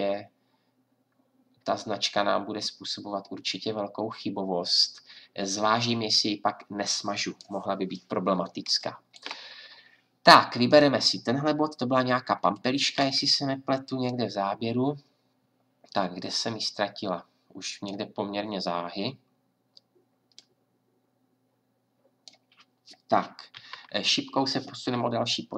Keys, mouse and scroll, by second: 0.1-10.7 middle drag, 16.0-18.0 middle drag, 20.4-22.1 drag, 23.5 Right.